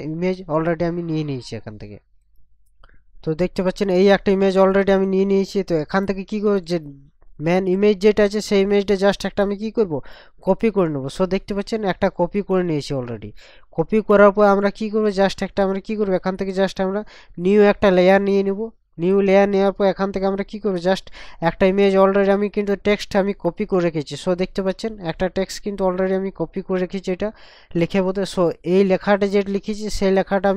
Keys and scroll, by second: 2.4 ctrl+KP_Subtract.